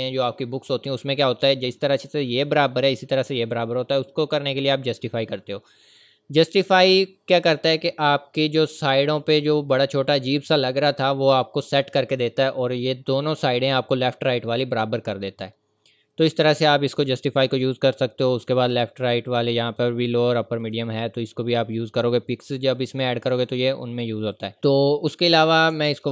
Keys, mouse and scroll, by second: 4.8 click, 9.7-10.7 scroll down 1, 10.7-11.1 scroll up 1, 16.1 click, 20.6 click, 21.1-21.6 scroll up 1, 21.7-22.6 scroll down 1, 22.6-23.2 scroll up 1, 23.4 click, 24.6-25.1 scroll up 1.